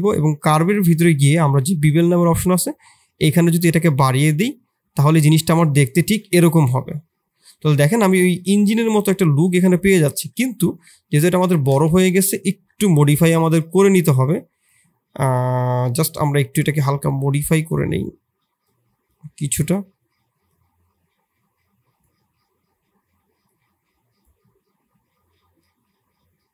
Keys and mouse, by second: 2.2-6.1 shift+drag, 6.6-7.5 middle drag, 9.4 middle click, 10.1 KP_1, 11.0 KP_3, 11.4 Tab, 11.8 shift+z, 12.4 shift+click, 13.3 click, 13.7 click, 19.1-24.2 drag, 25.7-26.5 drag.